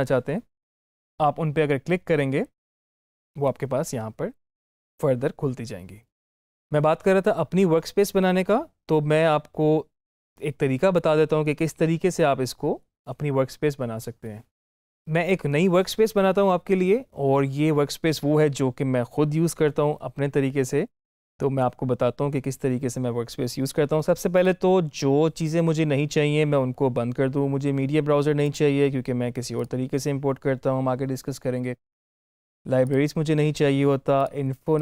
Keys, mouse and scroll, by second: 2.5 click, 10.8 click, 14.8 click, 24.2 click, 24.4 click, 28.3 click, 31.8 click.